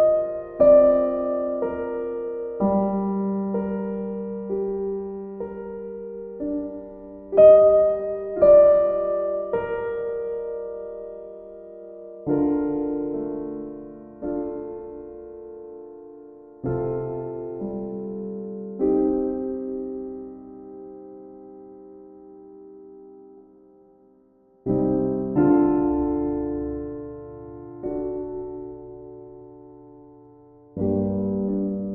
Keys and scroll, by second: 26.6 ctrl+z, 26.9 ctrl+z.